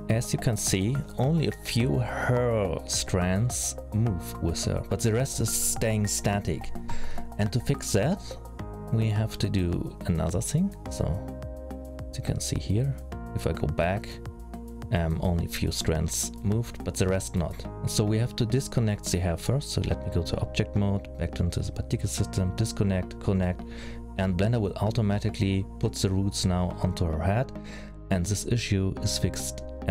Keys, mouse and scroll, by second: 1.4 middle click, 17.1 middle click, 18.4 click, 19.4 click, 20.4 click, 21.4 click, 23.0 click, 27.4 middle click.